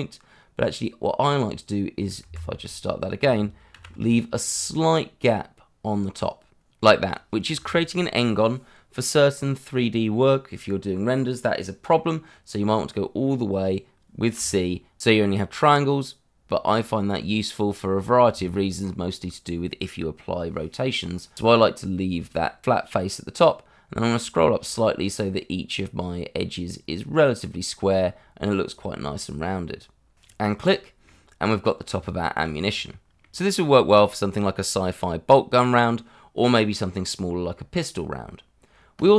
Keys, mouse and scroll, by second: 2.2 Escape, 2.6 middle click, 3.7 ctrl+b, 14.4 c, 23.8-27.2 scroll up 1, 30.1 click, 30.5 middle click, 31.9 Tab, 32.4 scroll down 1, 32.8 middle click, 33.5 shift+middle click, 34.4 click, 34.6 shift+middle click, 34.7 shift+middle click.